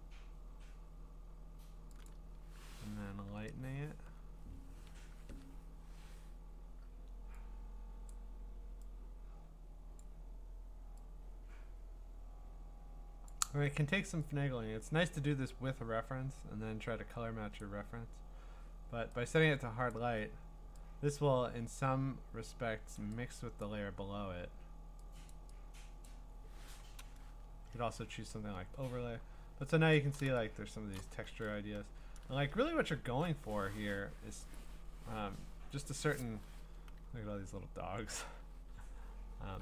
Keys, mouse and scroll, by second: 2.1 click, 5.1 ctrl+u, 8.1 click, 10.0 click, 13.3 click, 17.6 click, 19.9 click, 23.6 click, 25.3 click, 26.1 click, 27.8 Return, 28.3-29.0 scroll, 29.0-29.6 middle click, 29.4 middle click, 29.9 middle click, 30.0 middle click, 30.6 scroll up 10, 30.9 scroll, 31.0 click, 31.3-32.2 scroll up 10, 32.3-33.5 scroll down 17, 36.4 scroll down 1, 37.1-37.5 scroll up 7, 38.3-39.1 scroll down 15, 39.2-39.6 scroll.